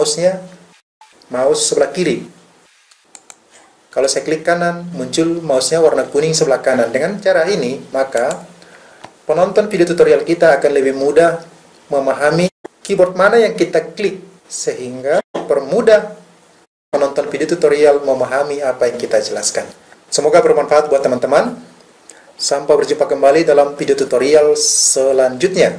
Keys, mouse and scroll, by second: 3.2-7.6 right drag.